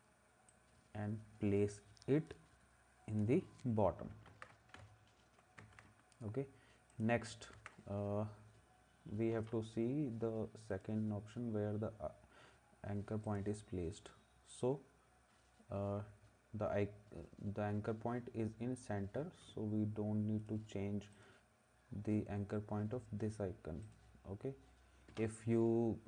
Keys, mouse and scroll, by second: 4.3 ctrl+s, 5.6 ctrl+s, 7.6 ctrl+s.